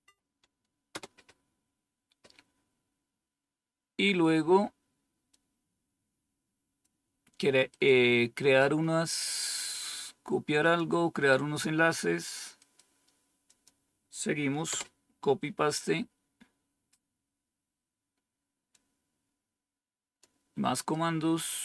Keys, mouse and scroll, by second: 0.8 Return, 3.1-3.6 scroll down 1, 3.6-5.2 scroll down 1, 5.2-6.8 drag, 10.5 click, 13.4 click, 14.6 Return, 16.7-17.5 scroll down 1, 17.5-18.6 scroll down 1, 18.6-20.2 drag, 20.7 right click, 21.4 click.